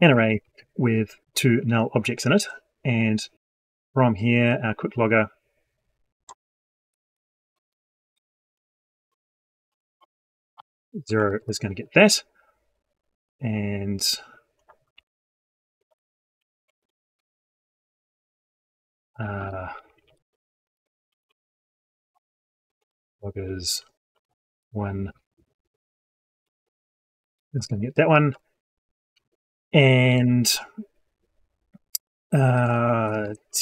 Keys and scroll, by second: 15.9 ctrl+x, 16.9 ctrl+v.